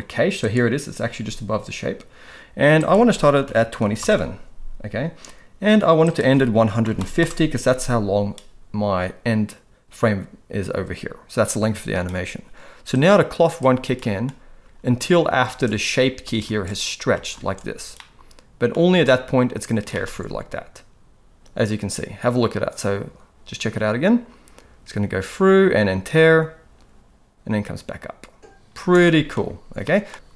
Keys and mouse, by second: 2.8-4.1 drag, 6.0-7.2 drag, 12.9-13.6 drag, 14.0 middle click, 14.7-18.9 typing, 18.0 middle click, 20.0 middle click, 20.2 alt+a, 28.8 space, 29.0 middle click, 29.8 middle click, 30.1 ctrl+s.